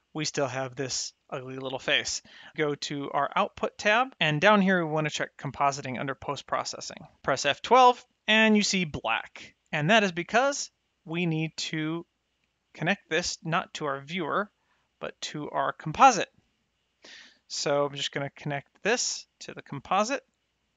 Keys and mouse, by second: 3.3 click, 5.1 click, 7.4 F12, 10.9 click, 11.9 middle click, 12.7 click, 14.2 click, 16.2 middle click, 18.4 click.